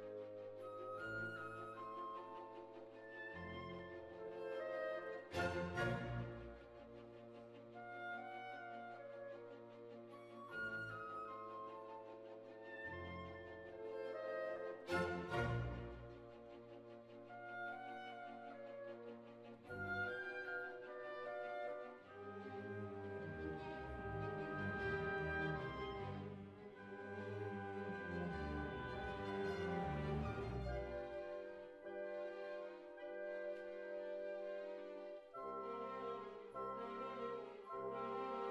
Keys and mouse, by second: 0.7 click, 1.5 g, 3.0 g, 3.9 ctrl+r, 4.9 g, 6.4 g, 7.6 g, 8.9 g, 10.3 middle click, 10.6 right click, 11.0 e, 11.7 g, 12.8 s, 14.4-15.6 drag, 15.6 ctrl+r, 16.1 click, 17.1 ctrl+r, 18.5 z, 20.0 Tab, 22.1 KP_7, 23.0 z, 24.5-26.9 drag, 27.5-32.7 right drag, 32.7 middle click, 32.7 click, 33.7 middle click, 34.5-36.2 drag, 36.2 Tab.